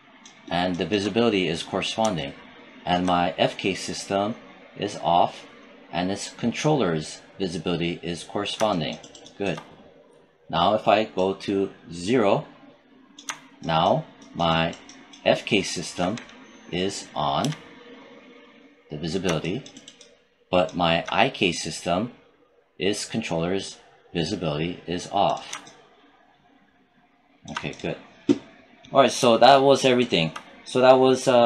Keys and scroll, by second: 17.2 q.